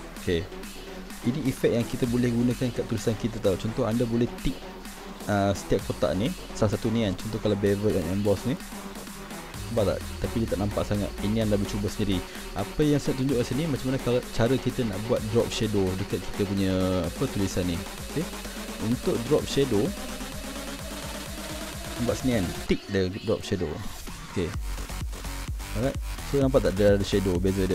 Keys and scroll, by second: 20.1 ctrl+=.